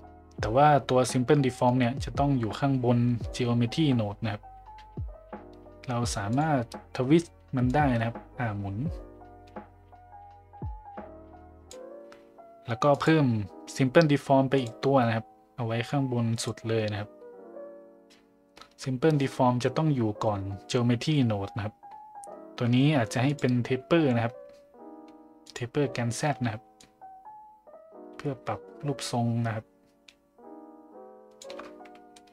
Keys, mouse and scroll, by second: 1.6-3.4 drag, 6.4 click, 7.7-11.8 drag, 12.9-14.7 drag, 15.9-16.5 drag, 23.3 click, 25.5 click, 26.8-31.4 shift+drag, 32.1-32.3 middle drag.